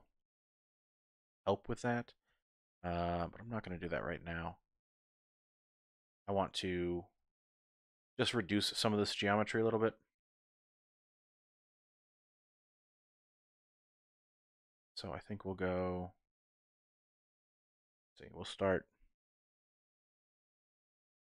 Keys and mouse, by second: 0.0 Tab, 0.3 click, 1.2 click, 2.3 Tab, 2.8 ctrl+z, 3.0 ctrl+z, 3.2 ctrl+z, 3.5 ctrl+z, 3.7 ctrl+z, 4.2 ctrl+z, 6.1 Tab, 6.8 click, 7.2 shift+click, 8.9 click, 10.1-11.4 drag, 12.4 shift+click, 12.6 shift+middle click, 14.4 shift+middle click, 15.1-17.2 middle drag, 18.6 1, 20.2-21.3 drag.